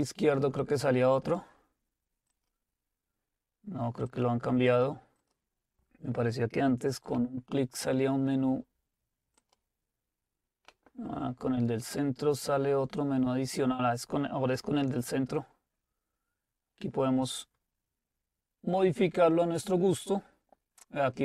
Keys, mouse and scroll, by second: 4.6 click, 9.4-10.7 drag.